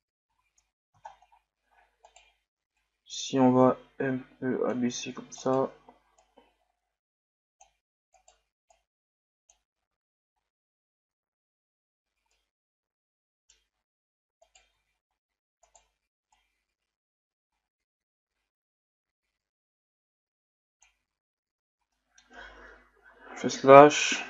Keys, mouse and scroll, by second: 0.3 a, 0.7-1.1 scroll up 2, 1.1 scroll down 2, 1.3 scroll up 1, 2.0 right click, 2.8-5.4 drag, 5.4 right click, 6.2-8.1 drag, 8.1 right click, 8.8-9.9 drag, 9.9 Tab, 10.4-11.2 scroll down 4, 12.1 scroll down 5, 12.3-13.7 middle drag, 13.7-14.4 scroll up 1, 14.4 right click, 15.1-15.7 scroll up 1, 15.7 right click, 16.4-19.3 drag, 21.4-21.9 scroll down 2, 21.9-22.9 middle drag, 22.9 KP_Divide.